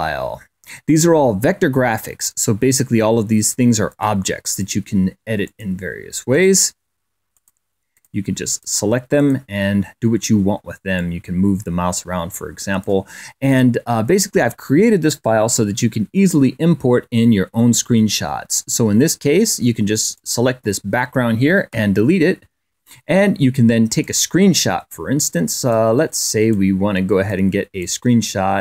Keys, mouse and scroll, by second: 3.7 click, 4.3 click, 5.2 click, 6.1 click, 7.1 click, 7.7 click, 8.3 click, 8.9 click, 10.7-12.8 drag, 13.2 click, 19.9 click, 21.5 Delete, 23.8 click, 24.4 click, 25.0 click, 26.7 click, 26.9 click, 27.1 click, 27.5 click.